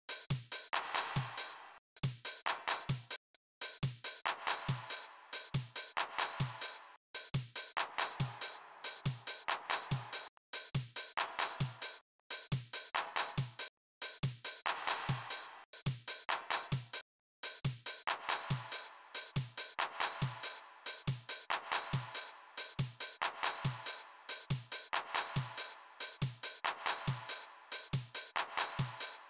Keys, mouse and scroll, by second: 1.5 click, 2.8 click, 6.7 click, 10.0 click, 13.4 click, 15.4 click, 16.8 click, 20.4 click.